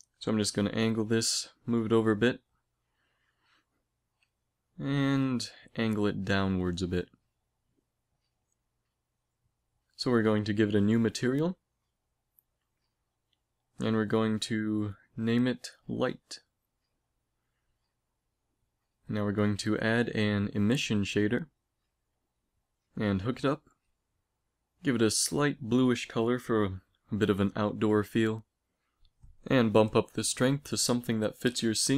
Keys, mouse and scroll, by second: 0.6 g, 1.4-3.8 middle drag, 4.8 r, 5.7 g, 6.9-8.1 drag, 7.4 s, 8.2 click, 11.0-12.6 drag, 13.0-17.6 drag, 18.9 click, 19.1 x, 19.4 shift+a, 23.0 click, 23.2 f, 24.0-26.2 drag, 29.4-31.2 drag.